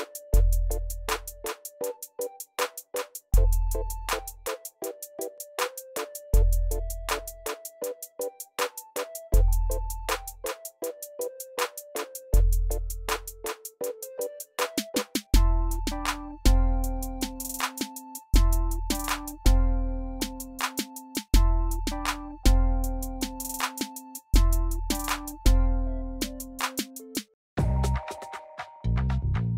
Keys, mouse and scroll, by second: 0.1 middle click, 0.5 middle click, 0.6 middle click, 1.0 middle click, 3.2 middle click, 11.9 middle click, 12.0 middle click, 13.0 middle click.